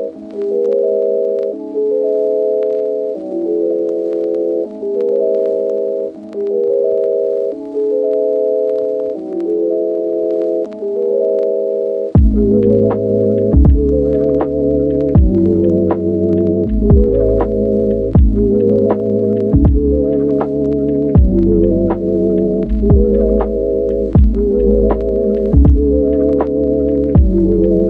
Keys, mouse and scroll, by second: 1.5 shift+middle click, 2.3 middle click, 3.9 g, 4.3 z, 5.5 g, 5.6 y, 8.1 click, 8.8 shift+click, 9.7 click, 10.0 click, 10.5 click, 12.0 shift+a, 13.8 click, 19.2 click, 20.2 click, 21.2 ctrl+z, 22.6 Return, 22.9 click, 23.3 ctrl+z, 23.3 Return, 23.4 ctrl+z, 23.9 Return, 24.5 Return, 25.3 Return, 25.9 Return, 25.9 click, 26.7 Return, 26.9 middle click.